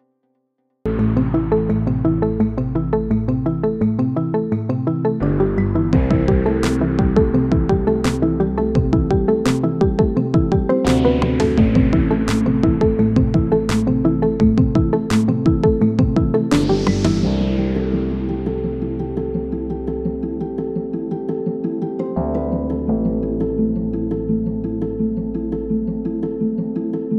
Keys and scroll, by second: 0.0-0.1 typing, 4.3 ctrl+k, 8.1 ctrl+r, 24.7 ctrl+g, 25.3 c.